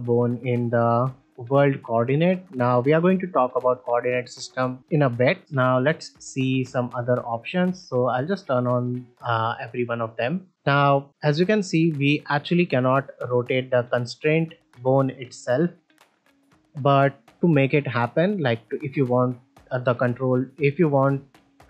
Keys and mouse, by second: 0.0 middle click, 1.1 middle click, 6.1 click, 7.7 click, 10.5 middle click, 10.8 shift+middle drag, 13.5 click, 14.7 click, 15.7-16.4 right drag.